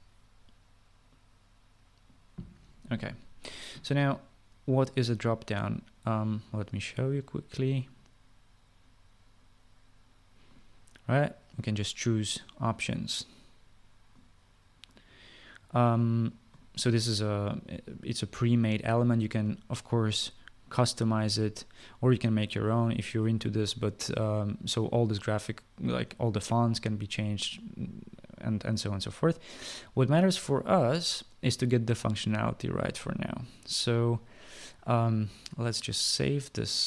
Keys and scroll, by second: 0.0-0.8 typing.